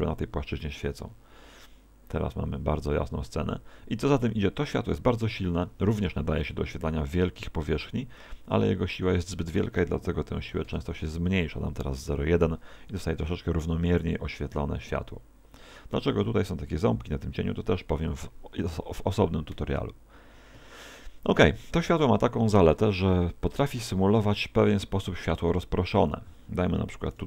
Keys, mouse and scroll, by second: 3.3 Escape, 9.3 click, 20.6 Escape, 22.0 KP_1, 23.5 alt+r, 26.0 click.